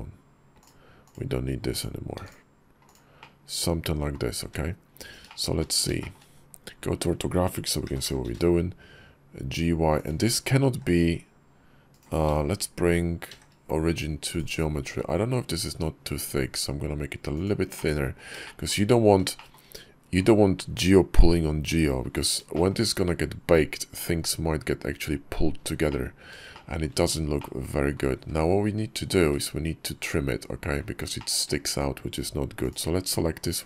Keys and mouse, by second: 0.9 click, 2.0 x, 2.7 click, 3.0 middle click, 4.3 `, 5.1 shift+middle click, 5.8 shift+middle click, 6.2 KP_5, 7.7 g, 10.5 s, 13.1 shift+s, 14.7 s, 17.6 click, 18.3 shift+middle click, 18.8 KP_5, 19.2 shift+middle click, 22.4 shift+middle click, 25.7 middle click, 26.4 shift+click, 27.2 click, 28.0 `, 29.0 `, 30.3 KP_5, 31.0 shift+click, 32.4 click.